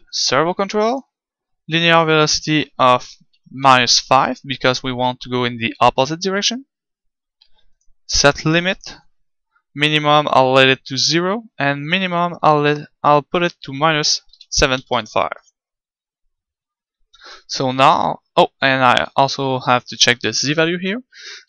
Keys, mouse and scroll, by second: 20.6 click.